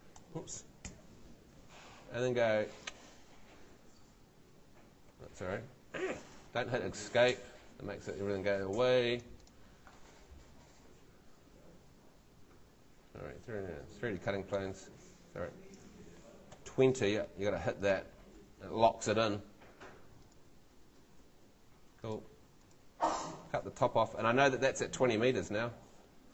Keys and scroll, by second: 0.0-0.8 typing, 5.1 Escape, 16.3-17.2 typing.